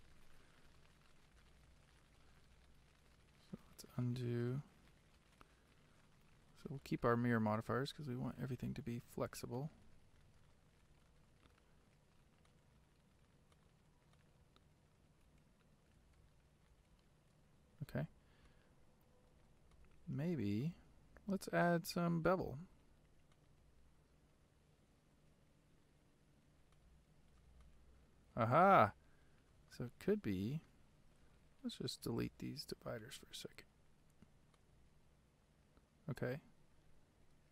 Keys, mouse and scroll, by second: 0.0 click, 0.8-1.5 scroll up 2, 1.5-3.8 shift+middle drag, 3.8 ctrl+z, 4.7 ctrl+z, 6.9-8.6 middle drag, 8.6 click, 9.7 click, 11.0 ctrl+z, 12.6 click, 13.7 click, 15.4 ctrl+z, 16.2 ctrl+z, 18.6-23.4 middle drag, 23.4 click, 26.8-31.1 shift+middle drag, 31.1 click, 32.1 x, 34.9-37.5 right drag.